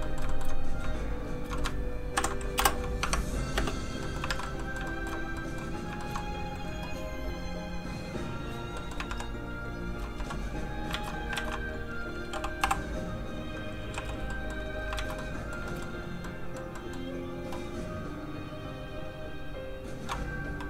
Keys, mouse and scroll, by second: 0.1 middle click, 0.3 shift+middle click, 1.2 shift+click, 1.6 ctrl+click, 2.2 ctrl+p, 2.6 Return, 3.0 Tab, 3.6 space, 3.9 scroll down 1, 4.0 middle click, 4.3 alt+a, 4.6 middle click, 4.9 shift+middle click, 5.4 middle click, 5.5 middle click, 6.0 shift+middle click, 7.8 middle click, 8.8 middle click, 9.1 shift+1, 10.2 1, 10.9 alt+shift+z, 11.7 shift+click, 12.6 m, 12.6 shift+z, 13.4 click, 13.9 3, 14.3 middle click, 15.0 alt+shift+z, 15.2 middle click, 15.6 shift+scroll up 1, 15.7 shift+middle click, 17.3 middle click, 18.2 click.